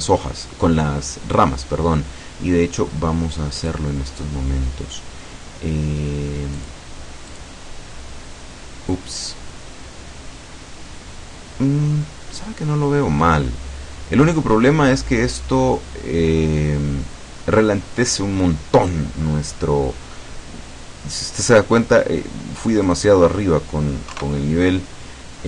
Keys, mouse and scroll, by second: 3.7 click, 6.6 click, 7.3 click, 12.1-12.7 scroll down 1, 12.7 middle click, 13.3-13.7 scroll up 2, 13.9-14.2 scroll down 2, 22.9 click, 24.2 KP_2.